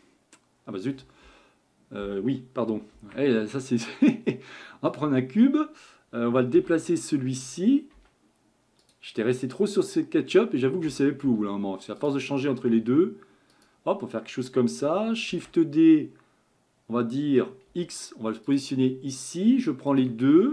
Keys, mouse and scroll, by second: 2.9 shift+a, 6.5 g, 10.9 g, 12.7 s, 15.3 shift+d, 18.8-19.9 scroll up 4, 19.9 shift+click.